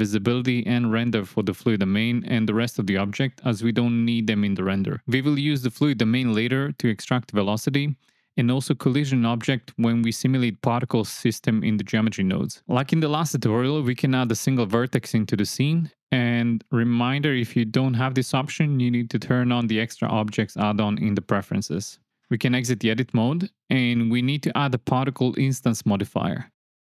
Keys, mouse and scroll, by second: 0.7 click, 5.0 click, 6.5 click, 7.6-8.5 drag, 10.5 click, 13.2 shift+a, 20.2 Tab, 21.5 click, 22.3-26.7 drag.